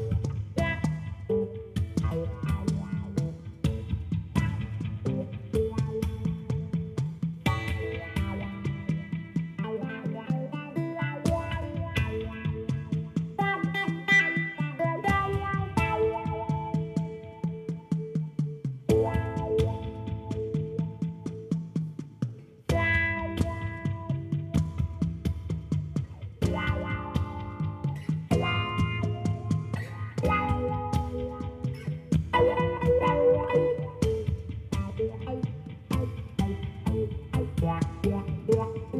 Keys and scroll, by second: 0.2 alt+a, 9.2 Tab, 14.1 i, 20.2 Tab, 37.5 shift+a.